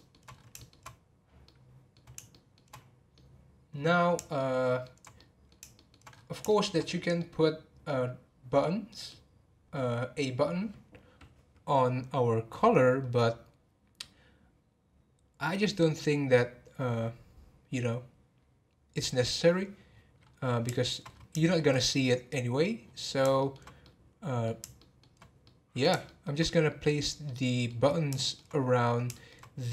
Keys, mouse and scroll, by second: 0.3 scroll up 1, 0.6-6.1 shift+middle drag, 6.1-6.5 scroll up 1, 6.5-10.2 shift+middle drag, 19.8-20.7 scroll down 5, 20.7 shift+middle click, 21.1-21.4 scroll up 3, 21.4-21.7 shift+middle drag, 21.7-22.8 scroll up 4, 22.8-23.3 scroll down 10, 23.3-26.7 shift+middle drag, 26.7 scroll down 4, 27.2-28.5 middle drag, 28.5-29.1 scroll up 3, 29.1-29.7 shift+middle drag.